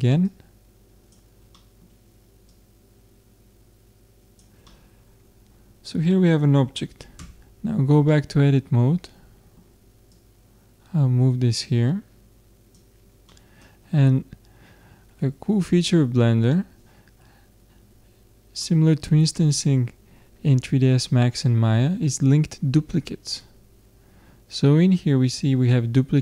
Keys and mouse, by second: 1.6-3.3 middle drag, 2.5-4.2 drag, 4.6-6.1 middle drag, 7.2 Tab, 7.2 middle click, 10.1-12.0 drag, 13.3-15.1 middle drag, 18.6-24.1 middle drag.